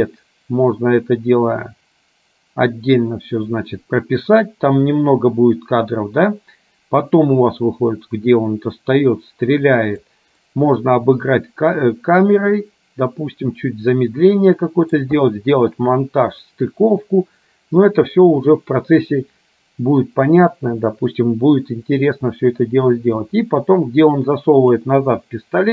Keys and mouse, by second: 7.2-10.2 drag, 10.5-15.1 middle drag, 24.8 click, 25.3-25.7 drag.